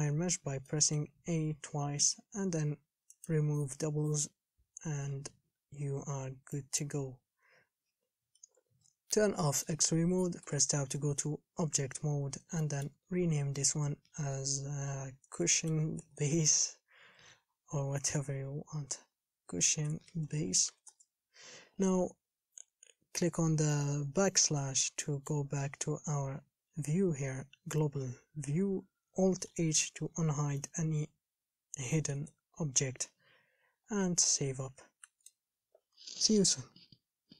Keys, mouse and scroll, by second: 0.3-0.9 scroll down 3, 0.9-7.0 middle drag, 7.0 click, 8.8 alt+z, 10.6 Tab, 11.2 KP_1, 11.8-12.8 scroll up 4, 12.8-21.1 shift+middle drag, 22.0-22.5 scroll down 5, 24.7 /, 25.2 middle click, 25.7-27.7 scroll down 4, 29.7 alt+h, 30.3 a, 30.8-32.4 middle drag, 32.4 KP_1, 34.0 Home.